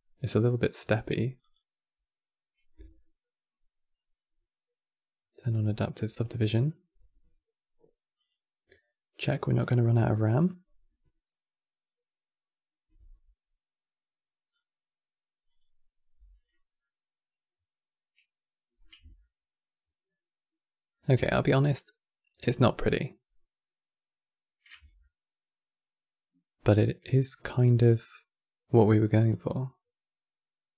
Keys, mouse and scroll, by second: 16.5-24.1 middle drag, 24.7-30.1 ctrl+middle drag.